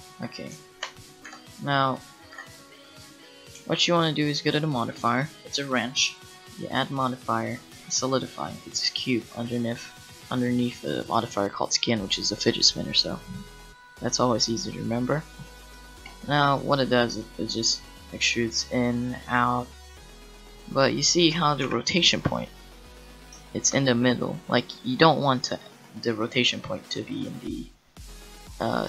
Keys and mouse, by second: 1.3 n, 2.3 n, 17.6-18.6 middle drag, 21.6 KP_1, 25.7-28.5 middle drag.